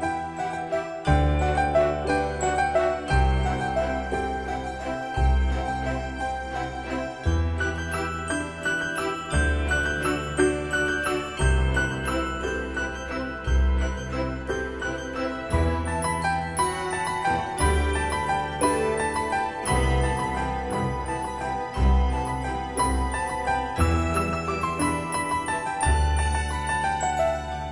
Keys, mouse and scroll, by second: 1.6-2.0 scroll up 1, 4.5 click, 6.9 Escape, 11.7 typing, 13.8 click, 15.5 typing, 20.8 Return, 23.7 Return, 24.5 click, 25.6 typing, 27.5 click.